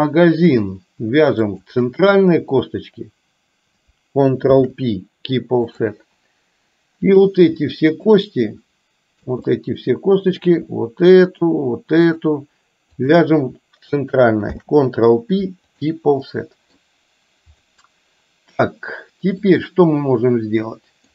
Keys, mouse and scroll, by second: 1.5 shift+click, 4.5 ctrl+p, 7.1 click, 8.1 shift+click, 9.6 middle click, 11.3 shift+click, 12.0 shift+click, 13.1 shift+click, 14.5 ctrl+p, 16.4 middle click, 17.6 click, 19.5-21.1 middle drag.